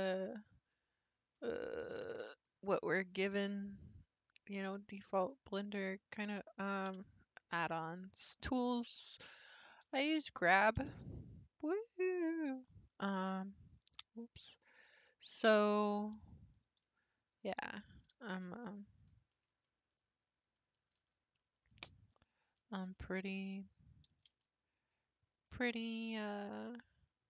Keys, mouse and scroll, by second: 0.6-1.0 scroll down 4, 1.0-1.9 scroll up 55, 2.0-2.4 scroll down 5, 2.5 scroll up 4, 2.7-3.4 scroll down 8, 3.6-5.0 scroll up 50, 5.1 scroll down 4, 5.2-6.6 scroll up 4, 6.9 n, 10.8 g, 13.2-14.6 scroll up 3, 14.7-15.2 scroll up 3, 15.2-16.6 shift+middle drag, 16.6 3, 17.3 click, 17.9 x, 18.6-20.4 middle drag, 20.4 click, 20.7 x, 22.9 1, 23.6 click, 24.1 g.